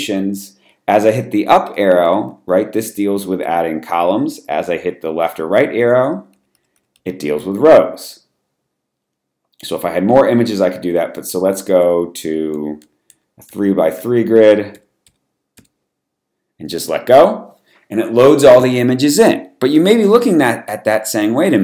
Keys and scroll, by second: 1.6 Up, 2.0 Up, 2.2 Up, 2.4 Up, 2.7 Up, 2.9 Up, 3.1 Up, 3.4 Up, 5.2 Left, 5.2 Left, 5.5 Left, 6.1 Right, 6.3 Right, 6.5 Right, 6.7 Right, 6.9 Right, 11.2 Down, 11.5 Down, 11.8 Down, 12.5 Down, 13.0 Down, 13.9 Down, 14.7 Left, 15.5 Left.